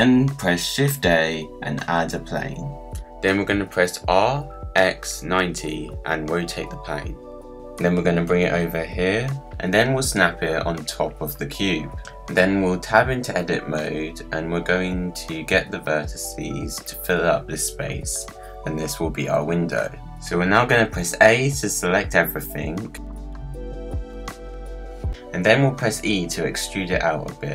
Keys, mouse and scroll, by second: 0.0 click, 1.0 shift+a, 3.8 g, 5.1 r, 7.5 g, 9.4 KP_Decimal, 9.8-10.1 scroll down 4, 10.1 g, 10.6 g, 11.5 g, 12.1-12.4 scroll down 9, 12.4 middle click, 12.9 Tab, 13.5 1, 13.6 click, 14.7 g, 16.3 click, 17.4 g, 19.9 scroll down 3, 20.1-21.1 scroll up 3, 21.1 a, 21.6 scroll down 3, 21.8-22.4 scroll up 5, 22.4 middle click, 23.2 scroll up 1, 23.3-25.0 middle drag, 25.4 e.